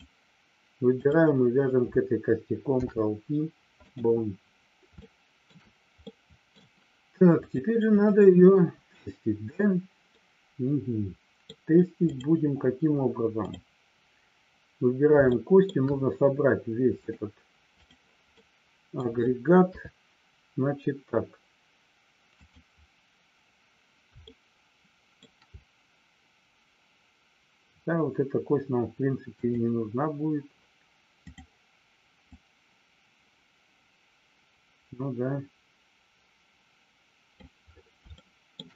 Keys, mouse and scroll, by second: 1.0 click, 2.6 ctrl+p, 5.0 shift+middle click, 6.1 middle click, 7.3 click, 10.2-11.4 middle drag, 15.2 shift+middle click, 17.1 click, 18.3 middle click, 19.6 KP_3, 22.2 click, 24.3 shift+middle click, 29.3 click, 31.3 click, 32.4-37.4 drag, 38.2 shift+middle click.